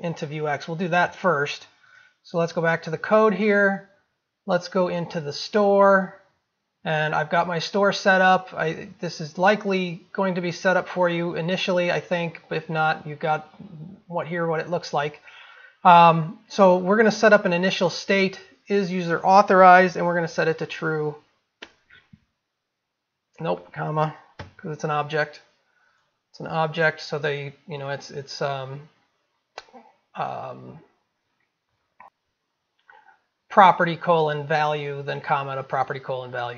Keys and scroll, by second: 17.7 ctrl+v.